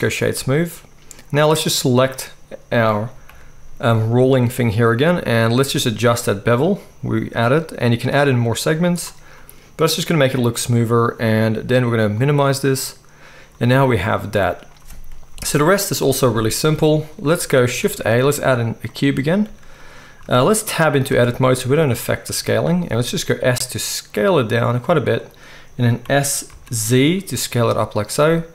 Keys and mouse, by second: 0.0-1.7 middle drag, 3.3 g, 4.0-5.9 middle drag, 5.9-25.2 shift+drag, 15.3 KP_1, 17.8 shift+a, 19.5 z, 21.1 Tab, 23.1 s, 25.2-28.5 middle drag, 26.0 s.